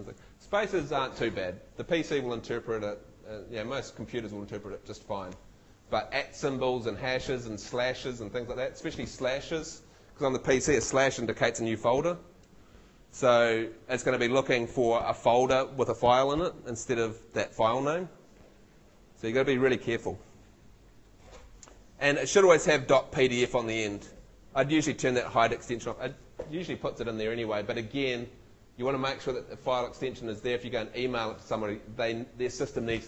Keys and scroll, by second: 2.7 Right, 5.7 Right.